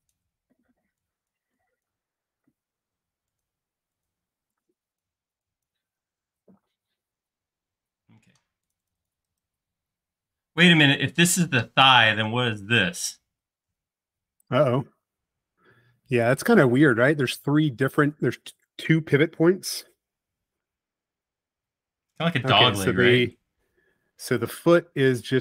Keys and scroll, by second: 0.5 e, 2.1-2.8 typing, 4.4 e, 6.5 space.